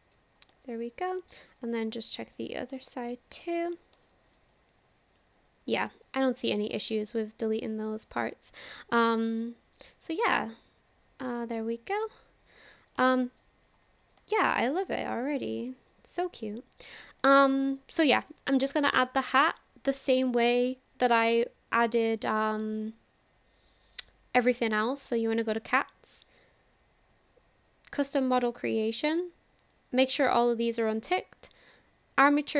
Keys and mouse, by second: 0.6 shift+middle click, 1.5 middle click, 2.8 shift+middle click, 3.1 click, 3.3 click, 3.4 middle click, 4.0 shift+middle click, 4.5-6.3 middle drag, 7.0-8.4 middle drag, 9.7-10.8 drag, 11.4 click, 12.4 click, 13.1 shift+middle drag, 13.2 shift+drag, 14.1 shift+click, 15.0 shift+drag, 15.4-17.0 drag, 17.4 shift+click, 18.0-18.3 drag, 18.8 click, 19.1-19.6 middle drag, 31.6 click.